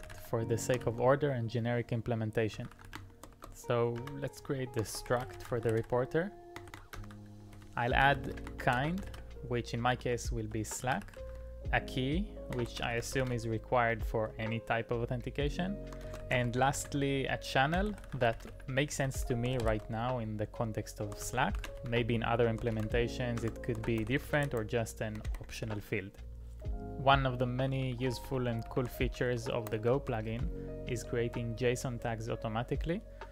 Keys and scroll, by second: 0.0-1.1 typing, 2.3-24.8 typing, 10.0 Return, 10.4 Return, 25.2 Tab, 25.4 Tab, 25.7 Return, 27.5-29.5 typing, 29.8 ctrl+p, 30.3 Return.